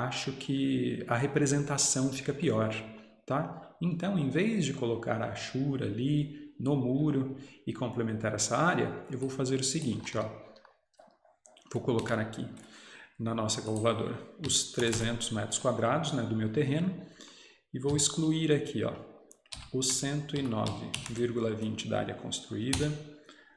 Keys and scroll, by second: 10.1 Escape, 10.2 Escape, 15.1-15.8 typing, 18.0 -, 19.6 1, 21.0 typing, 22.8 -.